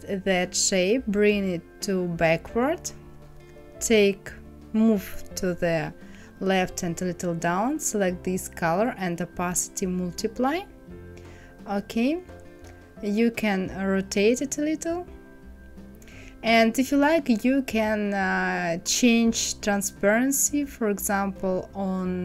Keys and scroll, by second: 2.4 Down, 3.2 Left, 3.5 Down.